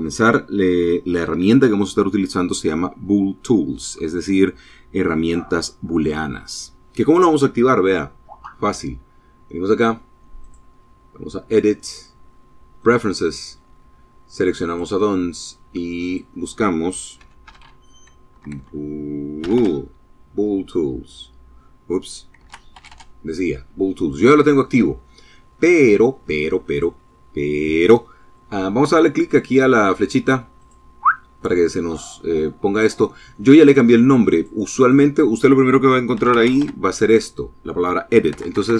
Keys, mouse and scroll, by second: 9.1 click, 11.5 click, 13.3 click, 14.7 click, 15.8 b, 16.2 o, 17.0 BackSpace, 18.1 o, 18.2 l, 21.1 BackSpace, 21.5 l, 25.3 click, 29.3 click, 32.3 click, 32.7 click, 33.0 click, 33.6 click, 34.8 shift+e, 35.0 shift+d, 35.1 shift+i, 35.3 shift+t, 37.0 BackSpace.